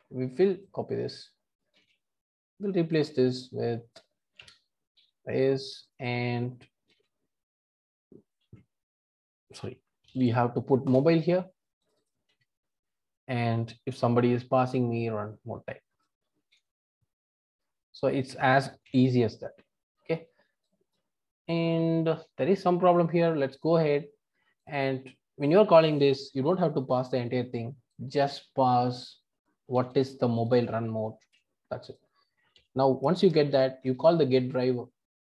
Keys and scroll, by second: 1.7 super+c, 4.9 super+v, 6.8 super+c, 8.5 super+v, 11.0 Return, 16.5 super+c, 18.8 super+v, 29.7 super+c.